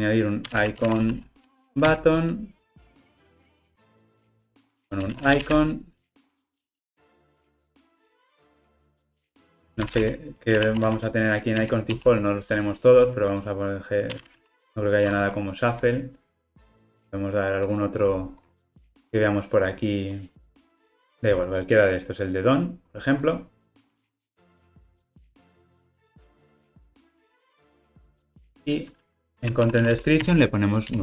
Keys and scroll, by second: 2.0 Return, 4.6 Tab, 9.1 Return, 30.3 Return.